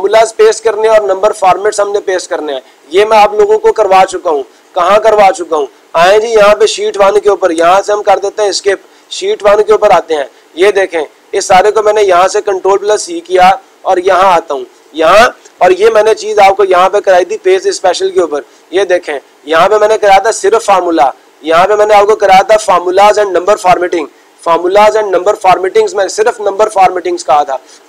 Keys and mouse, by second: 4.8-5.9 drag, 8.9 click, 11.9-12.9 drag, 14.6-15.7 drag, 17.7-18.7 drag.